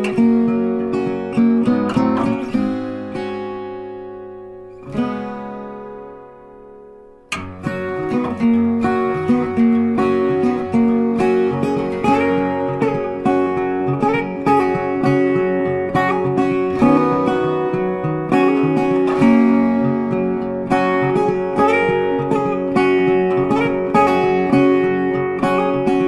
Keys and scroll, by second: 16.3 ctrl+t.